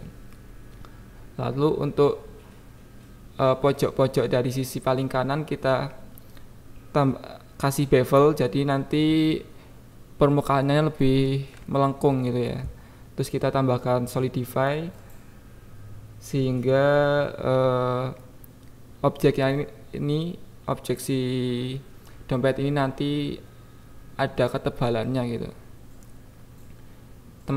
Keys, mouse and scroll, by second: 0.1 g, 0.2 y, 0.8 click, 1.0 ctrl+z, 1.5 click, 1.9 g, 2.1 y, 3.5 Tab, 4.3 click, 4.9 click, 5.4 click, 5.5 KP_1, 6.0 click, 6.3 click, 7.2 click, 7.8 KP_7, 8.5 click, 9.3 click, 9.4 click, 10.5 click, 11.8 click, 12.5 KP_1, 13.0 click, 13.2 click, 13.7 right click, 14.1 click, 14.4 KP_1, 14.9 click, 15.7 super+click, 16.6-17.9 shift+drag, 18.6 click, 19.0 KP_7, 19.7 click, 20.0 KP_1, 20.9 click, 21.9 click, 23.2 shift+click, 24.0-25.3 drag, 25.3 KP_1, 25.8 click.